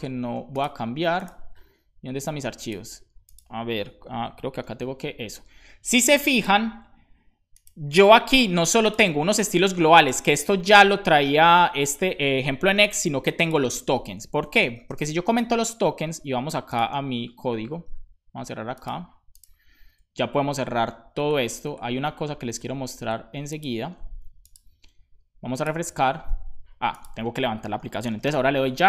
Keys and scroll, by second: 14.8 /, 14.8 space, 15.2 super+s.